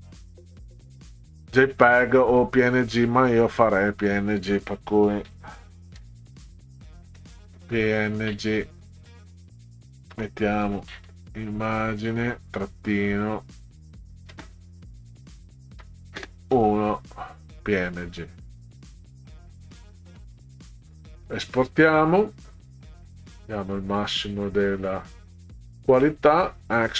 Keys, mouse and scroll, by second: 0.2 click, 3.6 click, 5.3 p, 6.0 n, 7.2 g, 8.9 click, 10.1 BackSpace, 11.9 click, 13.3 click, 14.3 space, 15.8 -, 16.2 space, 19.8 click, 25.9 click.